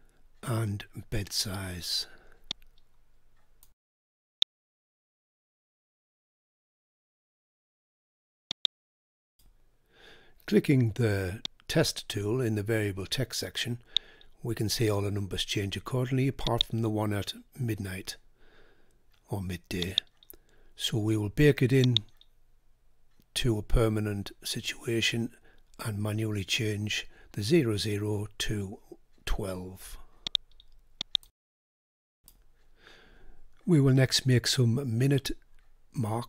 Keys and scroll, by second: 5.4 typing.